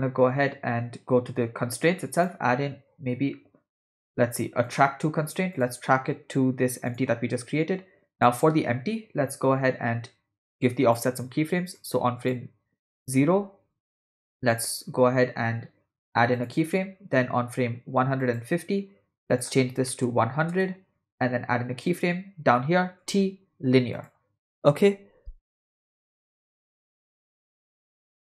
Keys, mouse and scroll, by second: 2.2-4.9 drag, 5.6 click, 8.2 click, 10.6 click, 12.0-12.4 drag, 13.7 a, 13.8 x, 16.5 click, 18.3 click, 19.3-20.6 drag, 20.2 0, 21.9 click, 23.0 t, 25.7 space, 27.2 space, 28.1 space.